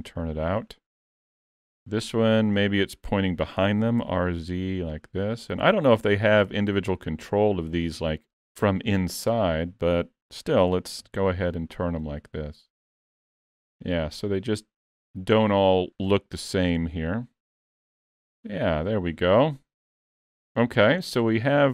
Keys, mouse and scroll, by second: 1.6 click, 2.0 shift+middle click, 3.7 r, 9.3 click, 10.7 r, 13.9 middle click, 14.8-15.4 scroll down 3, 15.0 alt+a, 15.4 middle click, 16.2 shift+middle click, 16.8 middle click, 21.0-21.4 scroll down 2, 21.4 shift+middle click.